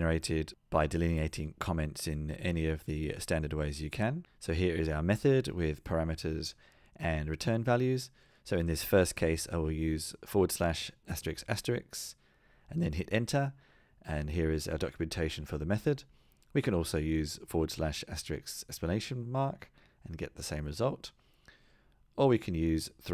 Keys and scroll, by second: 16.6 super+z.